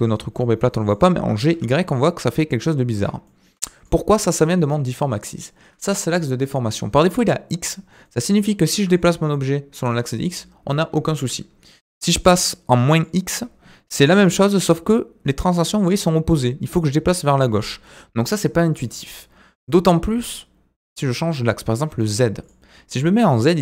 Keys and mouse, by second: 1.1 g, 3.3-3.9 middle drag, 8.0 middle drag, 8.7 g, 12.1-13.1 drag, 14.0 g, 18.7-22.5 drag.